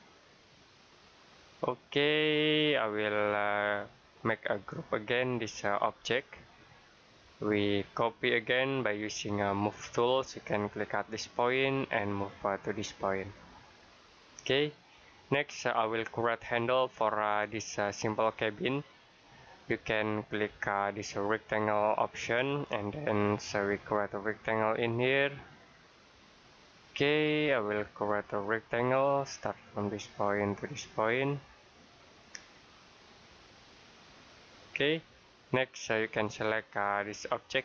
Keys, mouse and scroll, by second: 5.6 right click, 6.6 click, 14.2 click, 15.5 middle click, 21.3 click, 26.2 click, 26.8-27.3 scroll down 1, 27.3-27.7 scroll up 1, 29.7 click, 34.4 click.